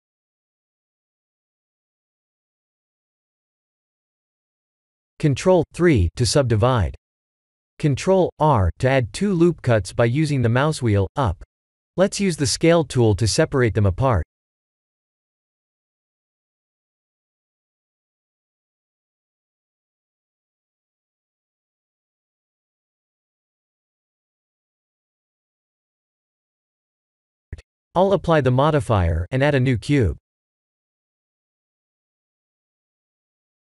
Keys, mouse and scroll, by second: 0.3 middle click, 5.3 ctrl+3, 6.1 Tab, 6.6 ctrl+r, 9.8 click, 11.4 click, 15.8 Tab, 16.2 middle click, 20.9 click, 21.4 ctrl+a, 23.0 click, 25.8 ctrl+a, 27.5 click, 27.9 ctrl+a, 29.1 shift+a, 32.3 KP_1, 33.2 s.